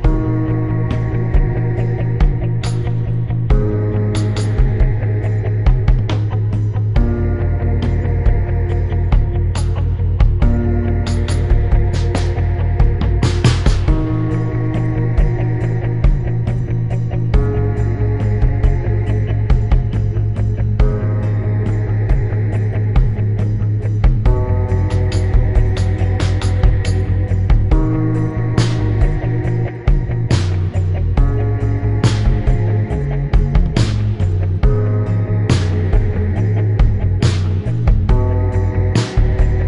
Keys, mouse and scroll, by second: 0.7 click, 1.8 click, 2.2 click, 4.3 Return, 5.3 click, 6.1 click, 7.7 click, 9.4 click, 9.8 click, 10.5 click, 11.5 shift+click, 12.6 shift+click, 13.3 click, 14.3 click, 14.8 Delete, 15.1 click, 15.3 Delete, 16.8 click, 18.3 click, 18.6 click, 19.3 shift+click, 21.2 click, 21.4 right click, 22.0 click, 22.9 shift+click, 24.3 click, 25.3 click, 25.7 right click, 26.5 click, 27.4 click, 27.8 click, 28.1 click, 28.5 right click, 29.0 click, 29.6 right click, 30.2 right click, 30.4 click, 30.8 Caps_Lock, 31.0 click, 31.5 click, 32.1 click, 33.5 click, 33.9 shift+Caps_Lock, 33.9 click, 34.0 shift+click, 35.1 click, 35.4 shift+click, 35.8 click, 36.4 click, 36.9 shift+click, 37.0 shift+click, 37.2 click, 37.8 click, 38.9 Delete.